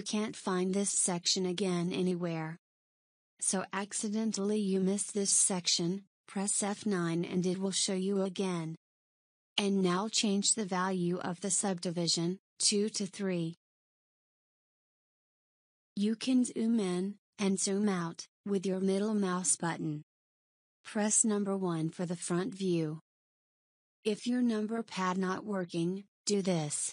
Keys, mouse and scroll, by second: 0.1 click, 5.1 click, 7.5 F9, 15.8 click, 17.4-18.1 scroll up 4, 18.1-19.0 scroll down 4, 19.1-19.6 scroll up 1, 19.6-20.6 scroll up 3, 20.6-21.8 scroll up 1, 21.8 KP_1.